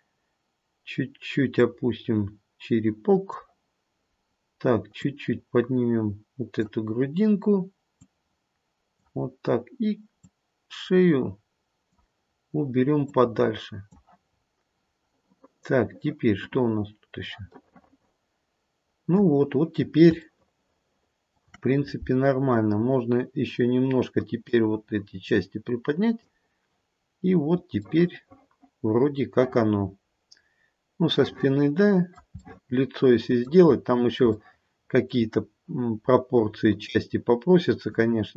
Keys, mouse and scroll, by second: 1.5 click, 4.0-5.0 scroll up 2, 5.0 click, 8.0 click, 10.2 click, 13.0 click, 14.2-16.0 scroll down 4, 17.4 middle click, 19.2-20.0 scroll down 1, 20.0-20.5 scroll down 1, 20.7 shift+middle click, 21.2 shift+middle click, 22.3-24.2 scroll up 1, 24.4 click, 27.1-27.8 scroll down 2, 27.8 middle click, 31.4 middle click, 32.1 middle click, 32.3 middle click, 32.8 middle click, 33.7-34.3 scroll up 3, 34.3 shift+middle click, 34.7 shift+middle click, 35.1 shift+middle click, 35.3-35.8 scroll up 2, 36.8 click.